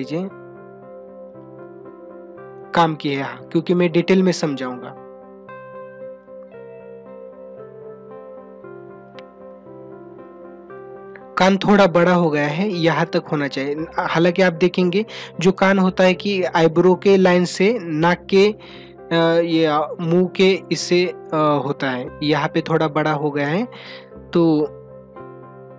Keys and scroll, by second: 5.5 space.